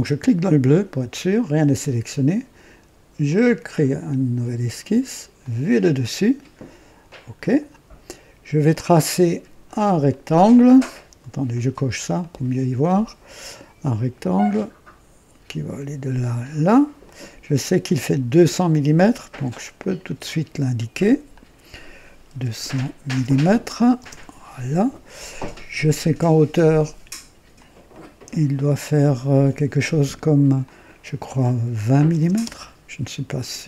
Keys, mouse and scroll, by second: 0.1 click, 3.2 click, 5.3 click, 7.0 click, 8.0-8.4 scroll up 1, 8.6 right click, 10.0 click, 12.1 click, 13.8 click, 16.3 click, 17.0 right click, 18.2 click, 19.0 click, 19.7 click, 21.2 click, 22.3-23.9 typing, 23.9 KP_Enter, 25.4-25.9 scroll up 2, 27.5 click, 27.7-28.4 typing, 30.5 click, 31.9-33.6 typing, 32.4 KP_Enter.